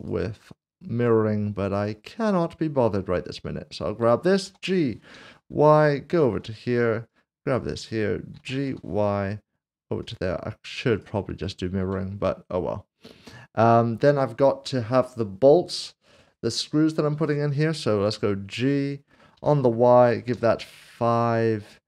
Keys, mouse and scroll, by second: 0.0 click, 5.1 typing, 6.1 ctrl+click, 7.8 click, 8.6 typing, 10.0 ctrl+click, 11.4 shift+middle click, 13.0 click, 19.3 typing, 20.3 typing.